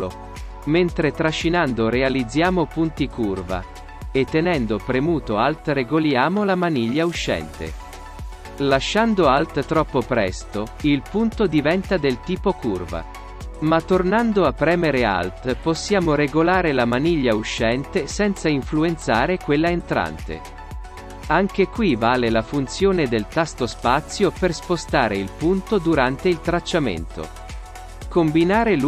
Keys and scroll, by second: 19.9 space, 23.0 space, 26.3 alt+space.